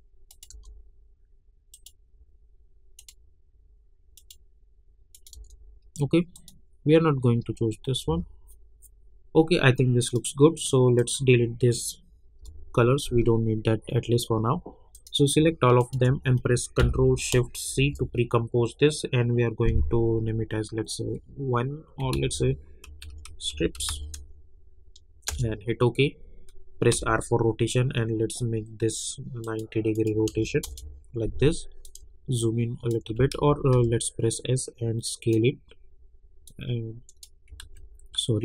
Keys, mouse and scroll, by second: 0.5 Return, 1.7 click, 5.3 Return, 6.3 click, 10.0 click, 14.9 click, 15.8 shift+click, 17.7 ctrl+shift+c, 21.0 1, 22.1 ctrl+a, 22.9-24.4 typing, 25.3 Return, 26.9 r, 29.4 click, 30.6 Return, 31.8-33.3 drag, 33.3 ctrl+z, 33.7 s, 34.3-37.6 drag, 37.6 ctrl+z.